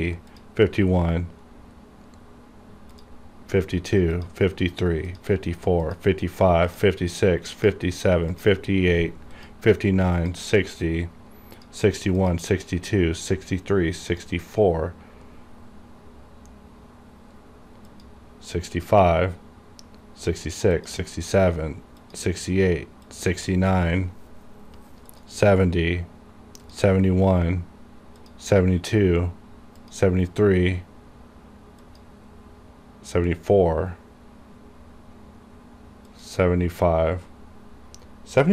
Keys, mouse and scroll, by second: 1.6 scroll up 1, 3.0 click, 13.3 click, 17.4 scroll down 1, 18.0 click, 24.5 scroll down 1, 25.2 click, 30.6 scroll down 1, 31.9 click, 34.2 scroll down 1, 36.2 click.